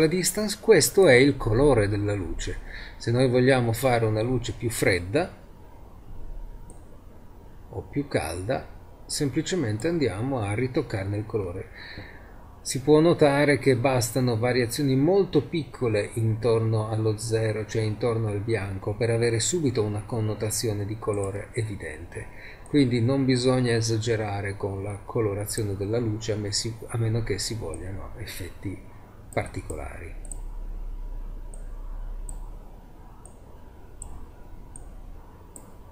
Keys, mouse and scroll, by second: 1.0-2.8 drag, 17.1-21.3 middle drag, 21.3-23.5 drag, 29.2-31.1 middle drag, 32.4-33.8 middle drag, 34.3-35.9 middle drag.